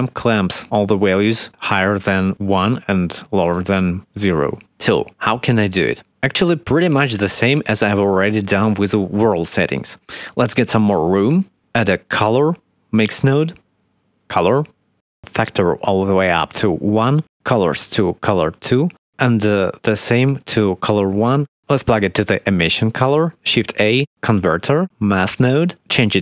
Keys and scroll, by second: 9.2 shift+a, 11.5 shift+a, 24.2 shift+a.